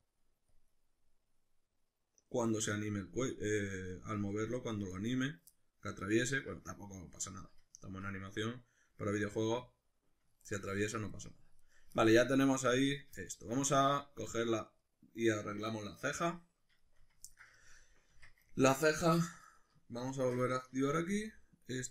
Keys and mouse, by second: 1.1-3.6 middle drag, 3.6-5.5 drag, 5.5-13.8 middle drag, 10.8 Tab, 11.6 right click, 12.9 right click, 13.8 right click, 14.3 right click, 14.6 right click, 14.8 right click, 16.4-19.6 middle drag, 18.1 Tab, 19.2 1, 19.4 right click, 20.2 shift+Tab, 20.6-21.9 middle drag, 21.0 g.